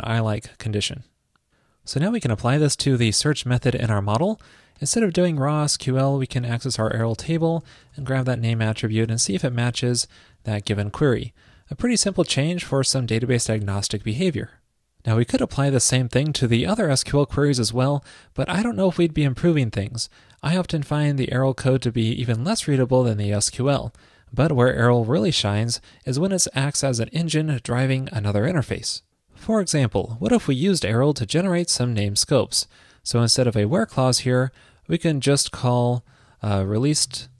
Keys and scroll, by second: 10.0 shift+super+Right, 13.6 super+s.